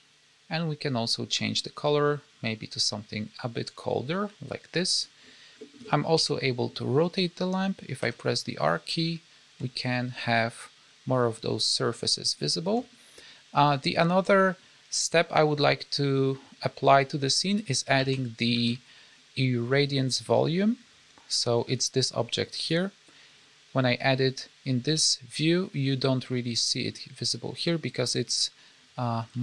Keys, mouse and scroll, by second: 5.5 middle click, 6.1 KP_7, 7.9 r, 13.0-13.7 scroll down 2, 13.7-17.0 scroll down 5, 17.5-18.3 scroll down 3, 17.9 alt+a, 18.5 shift+a, 23.0-23.8 scroll down 6, 23.8-24.9 scroll up 2, 24.9 z, 27.7-28.3 scroll up 5, 28.3-29.1 scroll down 7, 29.1 s.